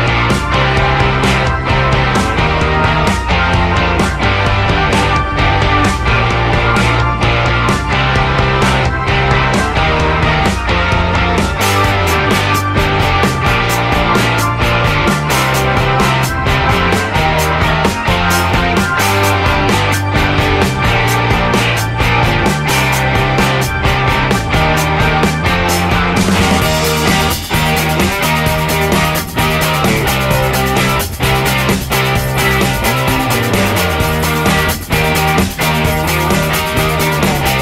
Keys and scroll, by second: 12.8 r, 16.5 ctrl+z, 18.0-19.3 typing, 27.3 e, 32.4 ctrl+c, 33.1 ctrl+v, 34.5-36.1 typing.